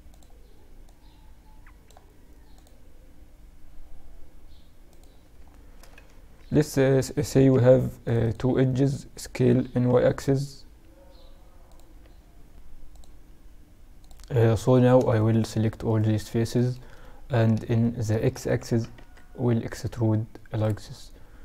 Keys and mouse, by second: 0.6-2.5 drag, 5.3 middle click, 6.1 ctrl+r, 8.5-11.4 middle drag, 9.3 s, 13.5-15.3 drag, 14.1-16.4 right drag, 16.4-20.0 middle drag, 18.1 e.